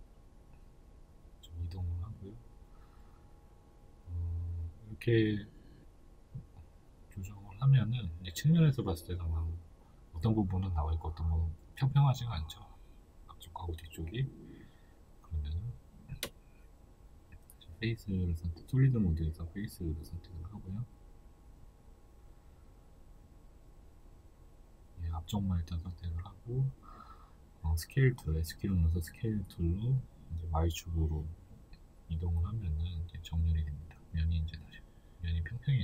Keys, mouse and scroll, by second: 0.9 click, 1.1 shift+middle click, 1.7 right click, 2.2-13.9 shift+middle drag, 2.6-3.1 scroll down 2, 7.7 KP_3, 10.3 Tab, 13.9 right click, 14.7 right click, 15.4 Tab, 15.8 right click, 16.7 3, 17.0 right click, 17.3 shift+right click, 17.9 right click, 20.2 click, 21.0 right click, 21.3 shift+right click, 21.5 shift+right click, 21.8 shift+right click, 22.1 middle click, 23.0 shift+right click, 23.2 shift+right click, 23.5 shift+right click, 23.9 shift+right click, 24.3 middle click, 25.2 right click, 25.4 shift+right click, 25.8 shift+right click, 26.2 shift+right click, 26.5-32.1 middle drag, 27.4 KP_3, 28.7-29.5 scroll up 2, 30.3 s, 32.1 click, 32.4 middle click, 33.2 right click, 33.4 shift+right click, 33.7 shift+right click, 34.2 shift+middle click, 34.7 shift+right click, 35.2-35.8 middle drag, 35.7 KP_3.